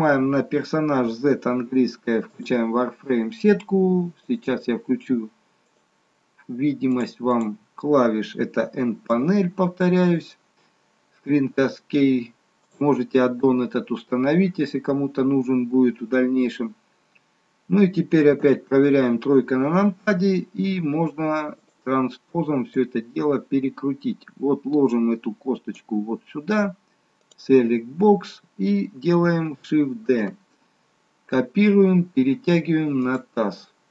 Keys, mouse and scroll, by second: 12.8 click, 18.4 KP_3, 23.1 click, 27.3 click, 30.2 shift+d, 33.7-33.9 scroll up 2.